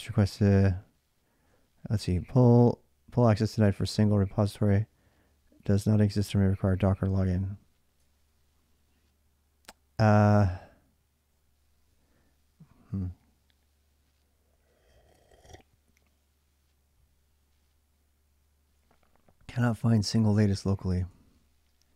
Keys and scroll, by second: 7.8 ctrl+[, 8.0 k, 20.9 ctrl+c.